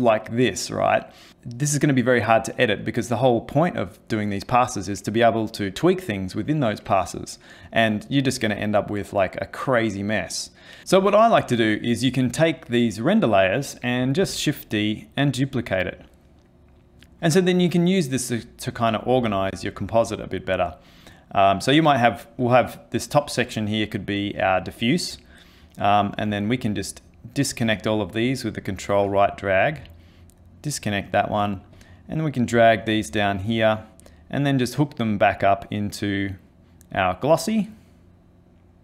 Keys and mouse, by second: 14.2 shift+d, 26.8 ctrl+right click, 30.6 ctrl+right click, 31.7 click, 32.5 click, 34.0 click, 34.7 click, 35.9 click, 37.2 click.